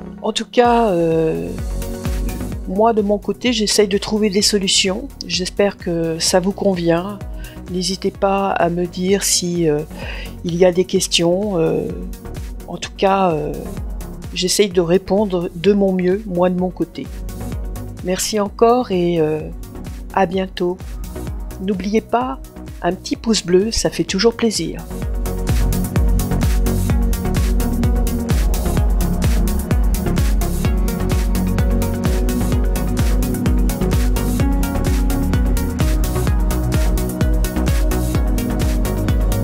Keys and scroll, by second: 8.8 Return, 37.3 Return.